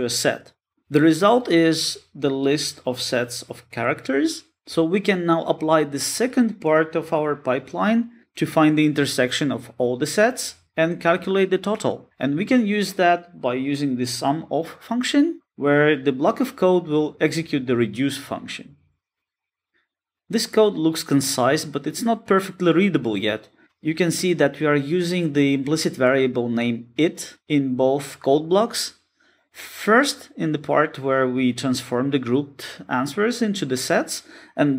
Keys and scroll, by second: 0.3 Return, 12.1 Return, 15.9 Return, 17.5 Return, 18.6 Return, 19.6 alt+super+v.